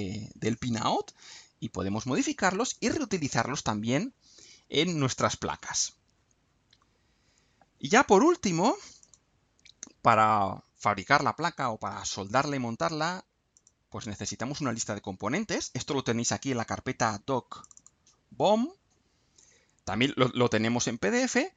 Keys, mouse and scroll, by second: 0.4 click, 4.5-4.8 scroll down 2, 6.8 scroll up 2, 9.0 click, 13.6 click, 17.6 click.